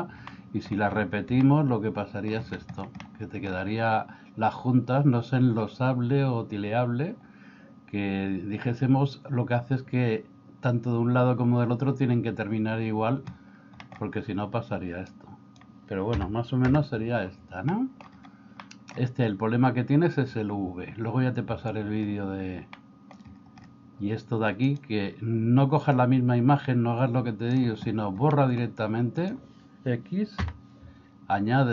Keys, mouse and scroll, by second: 0.3 middle click, 1.4-2.4 middle drag, 3.1 middle click, 13.8 middle click, 15.2-16.7 drag, 17.7 middle click, 18.7 middle click, 22.8 middle click, 28.4 middle click, 29.2 click, 30.5 x.